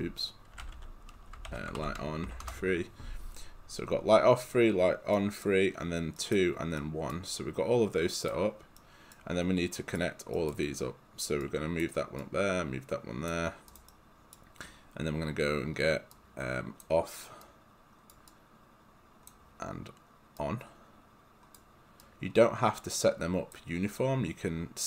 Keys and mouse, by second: 0.0-2.8 typing, 5.2 right click, 8.3 click, 8.8 right click, 11.5 click, 13.9 right click, 16.1 click, 18.4 click, 20.5 click, 22.1 click.